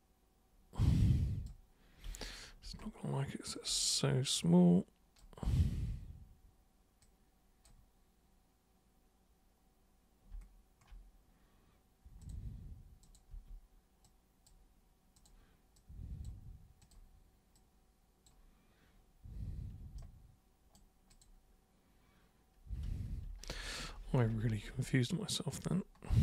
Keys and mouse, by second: 4.3 super+click, 7.0 super+click, 12.2 super+click, 13.0 super+click, 13.3 super+w, 14.0-14.4 super+drag, 15.1 super+click, 15.7-16.2 super+drag, 16.8 super+click, 17.5-18.2 super+drag, 20.0 super+right click, 21.1 super+click, 22.9 ctrl+super+z, 23.1 ctrl+super+z, 23.3 ctrl+super+z, 23.5 ctrl+super+z, 23.7 ctrl+super+z, 24.1 ctrl+super+z, 24.3 ctrl+super+z, 24.5 ctrl+super+z, 24.7 ctrl+super+z.